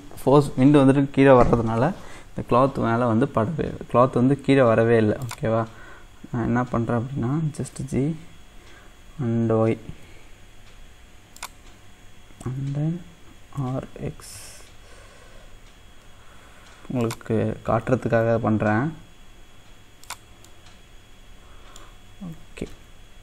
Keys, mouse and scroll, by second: 5.3-7.8 drag, 7.8 g, 13.6 r, 20.4 scroll up 1, 20.5-22.4 middle drag, 22.4 g.